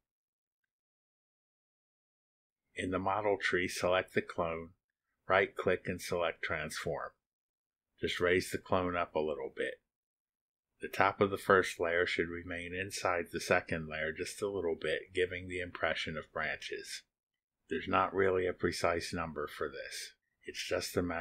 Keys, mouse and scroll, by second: 0.0-1.3 typing, 2.1 Tab, 3.4 click, 4.5 click, 4.9 click, 6.6 click, 8.5-10.3 drag, 11.2 click, 11.3 middle click, 11.5 click, 16.7-20.0 drag.